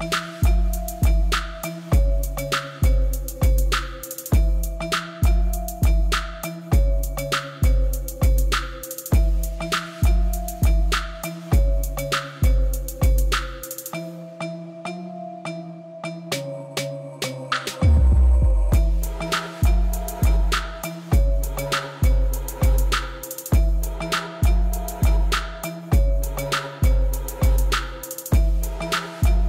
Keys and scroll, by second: 4.1 ctrl+r, 4.8 Return, 6.1 s, 6.2 x, 6.3 0, 6.4 Return, 7.4 s, 7.6 x, 7.7 0, 7.8 Return, 14.7 3, 17.0 shift+d, 17.9 Escape, 18.7 p, 20.1 Tab, 21.4 shift+z, 23.2 shift+z, 25.3 Tab, 26.7 a, 27.9 s, 28.2 x, 28.7 ., 29.0 3.